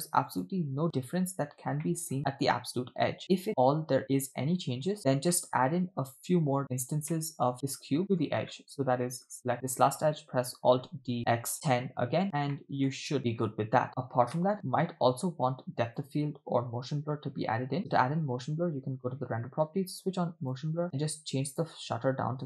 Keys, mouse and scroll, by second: 0.5 click, 1.2-1.9 scroll up 4, 1.9 shift+middle drag, 3.6 click, 4.9 click, 5.0-5.3 scroll down 4, 5.4-5.9 middle drag, 6.2-6.8 scroll down 3, 7.2-7.5 shift+middle drag, 7.5 drag, 8.0 middle click, 8.0 scroll down 1, 8.6 shift+middle click, 9.7 click, 11.1 d, 12.5-12.9 middle drag, 13.1-13.5 scroll down 2, 13.2-13.5 shift+middle drag, 13.8 scroll up 2, 14.5 KP_0, 16.0 click, 17.8 click, 20.1 click, 20.5 click, 21.5-22.4 drag.